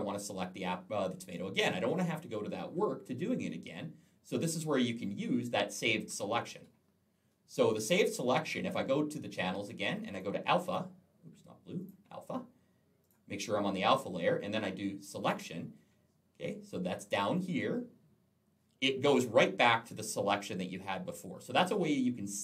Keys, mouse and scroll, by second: 1.0 alt+scroll up 1, 3.1 alt+scroll down 1, 4.6-4.9 alt+scroll up 1, 6.3 middle click, 6.5 double middle click, 9.9 click, 11.7 click, 12.8 click, 15.0 click.